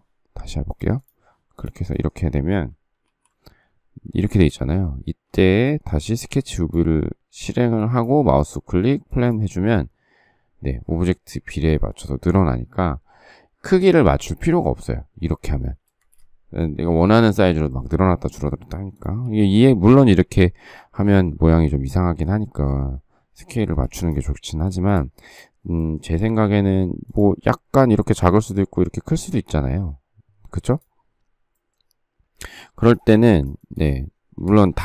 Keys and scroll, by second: 3.0 alt+t, 5.3 shift+space, 15.8 space, 15.9 Escape, 19.2 s, 20.5 Escape, 23.6 space, 24.7 space, 26.2 s, 32.6 space, 34.4 Escape.